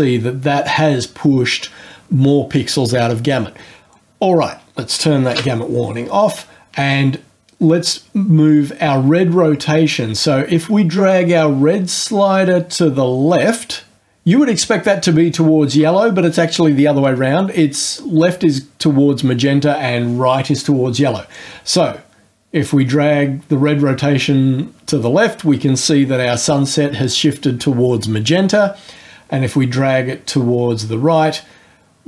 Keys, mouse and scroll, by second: 5.3 ctrl+g, 21.3-32.0 drag.